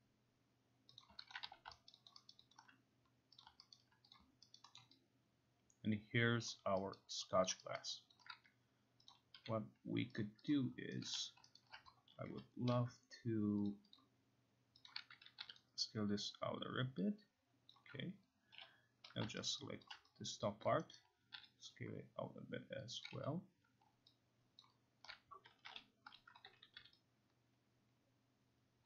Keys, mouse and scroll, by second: 1.0 click, 1.3 alt+click, 1.5 q, 1.9 alt+middle click, 2.1 alt+click, 3.4 click, 3.7 alt+right click, 4.1 click, 4.6 alt+right click, 4.8 alt+middle click, 6.5 alt+click, 7.0 alt+right click, 8.7 alt+click, 9.1 click, 9.4 q, 10.2 click, 10.5 click, 11.1 right click, 11.2-12.8 typing, 11.6 alt+right click, 13.7 click, 14.0 click, 14.9 click, 15.5 t, 17.7 click, 18.4 middle click, 18.6 0, 19.5 alt+right click, 19.9 alt+click, 20.7 click, 21.0 alt+right click, 21.4 t, 23.1 click, 23.1 q, 24.6 alt+click, 25.3-26.2 typing, 26.2 click.